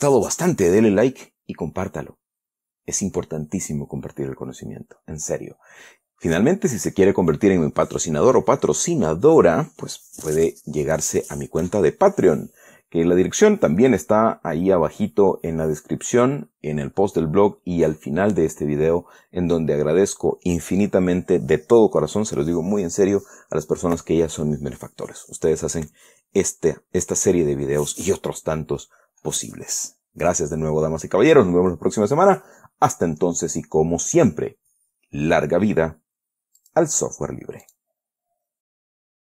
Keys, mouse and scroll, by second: 37.0 click, 38.0 click.